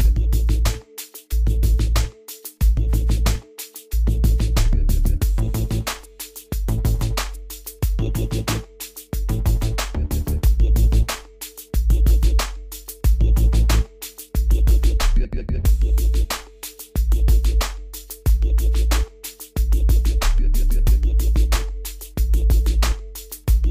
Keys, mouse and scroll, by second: 0.2-0.6 scroll down 1, 0.8-1.8 scroll up 1, 3.5 click, 12.8 click, 13.4-13.8 scroll up 1, 14.4 click, 17.2-17.8 scroll up 1, 17.8-22.0 drag, 22.0-22.3 scroll up 1, 22.3-22.8 scroll down 1, 23.5 click.